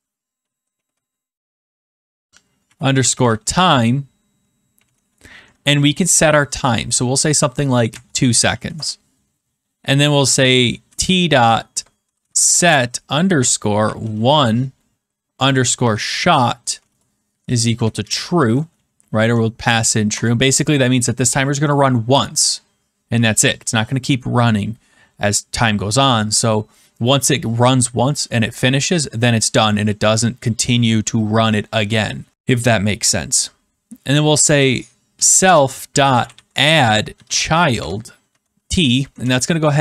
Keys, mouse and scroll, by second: 1.1 typing, 2.3-5.3 typing, 7.8-8.4 typing, 8.7 Return, 10.6-19.1 typing, 20.0 Return, 34.1-38.7 typing, 39.0 Right, 39.2 Return.